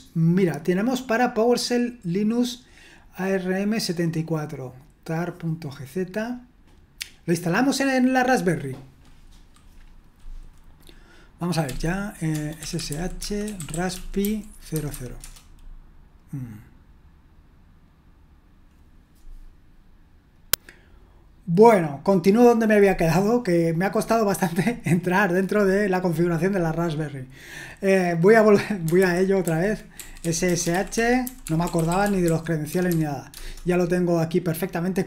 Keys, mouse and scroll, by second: 8.7-11.7 drag, 11.7-15.3 typing, 15.2 Return, 20.4 click, 29.0 super+h, 29.5 super+h, 29.9-33.4 typing.